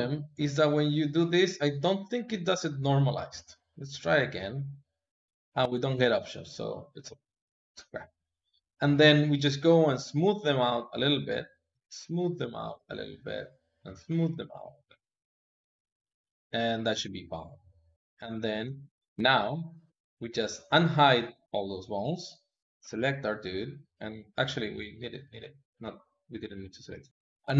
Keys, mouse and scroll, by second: 1.6-3.7 middle drag, 3.7-7.1 drag, 7.1-9.1 middle drag, 9.1-15.5 drag, 15.5-17.9 middle drag, 18.5 ctrl+Tab, 19.1 middle click, 19.9 click, 20.4 click, 21.4 alt+h, 21.9 click, 22.9 click, 23.7-26.8 drag.